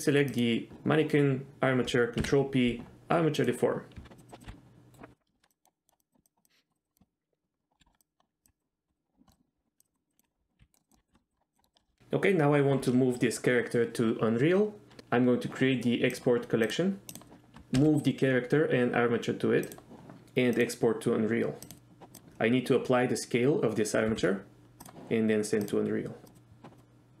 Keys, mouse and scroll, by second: 0.4 shift+click, 2.3 ctrl+p, 4.0 Tab, 4.2 click, 4.4 click, 4.5 r, 4.5 r, 4.9 right click, 5.2 middle click, 5.5 click, 6.0 click, 6.6 click, 7.8 KP_3, 8.0 click, 8.6 click, 8.9 click, 9.3 shift+middle click, 9.3 click, 9.8 click, 10.2 click, 10.6 r, 10.8 middle click, 10.8 r, 10.8 click, 11.5 click, 11.6 shift+middle click, 11.8 middle drag, 16.2-17.3 drag, 17.9 m, 20.7-21.9 drag, 24.2 ctrl+a, 25.8-27.2 drag.